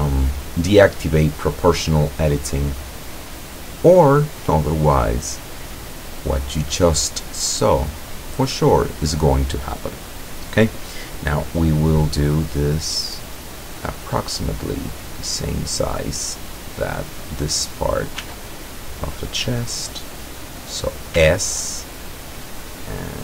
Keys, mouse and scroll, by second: 2.3-4.3 drag, 5.0-6.6 drag, 7.3-10.5 drag, 11.6-13.5 middle drag, 13.8-14.9 drag, 14.9 middle click, 16.1 click, 18.3 s, 20.7 click, 21.2 s.